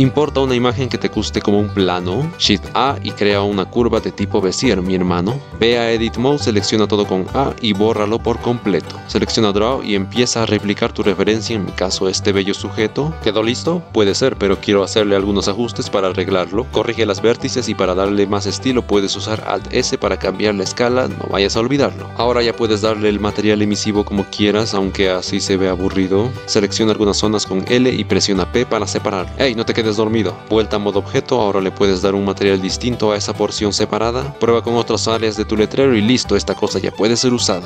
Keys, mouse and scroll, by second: 1.3 click, 2.2 middle click, 2.5 shift+a, 4.6 middle click, 4.8 click, 5.0 middle click, 6.4 Tab, 7.1 a, 7.7 x, 9.8 click, 10.3 click, 10.5 click, 10.9 click, 11.1 ctrl+z, 11.3 click, 11.5 shift+middle click, 11.6 ctrl+z, 11.7 click, 11.9 click, 12.2 click, 12.4 click, 12.6 click, 12.9 click, 13.6 click, 14.6-16.6 middle drag, 16.6 click, 16.8-18.8 typing, 17.9 shift+click, 18.9 alt+s, 21.2 alt+s, 21.4 alt+s, 21.5 shift+click, 21.7 alt+s, 22.1 alt+s, 22.6 click, 22.9-23.3 middle drag, 23.7 click, 24.0 middle click, 24.1 shift+middle click, 24.2 shift+middle click, 26.7-28.5 typing, 30.4 p, 30.6 Tab, 33.3 a, 33.3 a, 33.7 middle drag, 33.9 click, 34.5 Tab, 34.5 l, 34.8 Tab, 35.0 Tab, 35.0 l, 35.4 p, 35.5 click, 35.7 a, 35.9 Tab, 36.6 click.